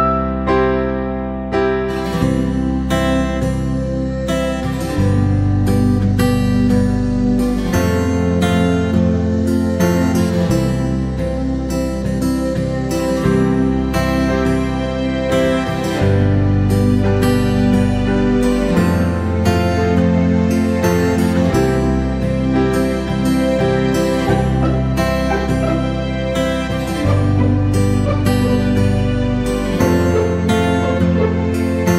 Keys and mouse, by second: 0.4 c, 1.0 g, 2.5 right click, 2.7 c, 3.4 g, 5.0 right click, 5.7 g, 6.7 c, 7.6 g, 8.7 right click, 9.0 c, 9.6 g, 11.6 right click, 11.9 c, 14.4 shift+middle drag, 15.1 right click, 15.3 c, 16.3 g, 18.9 r, 19.7 g, 20.7 c, 21.1 g, 22.7 right click, 22.9 c, 23.5 g, 25.2 KP_1, 26.0 alt+z, 26.4-26.9 right drag, 27.1 ctrl+r, 28.3 alt+z, 28.5 right click, 29.0 b, 30.8 b.